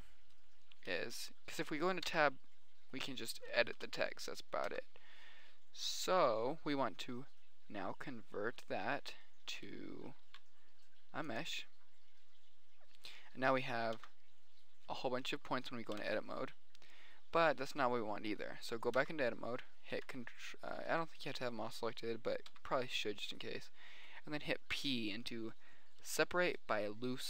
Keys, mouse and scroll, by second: 2.3 middle click, 2.4 Tab, 2.9 drag, 4.2 BackSpace, 4.2 w, 5.1 Tab, 9.5 middle click, 10.6 alt+c, 11.9-13.3 drag, 14.3 Tab, 16.3 Tab, 19.4 Tab, 20.2 a, 21.4 a, 23.0 a, 25.1 p, 25.7 click, 26.3 click.